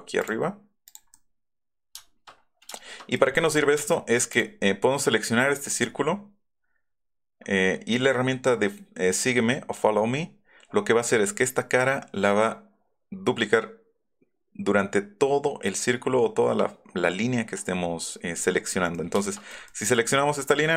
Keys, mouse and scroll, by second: 0.2 click, 0.8 click, 3.8 space, 4.3 click, 18.9 shift+click, 19.3 middle click, 19.6 middle click.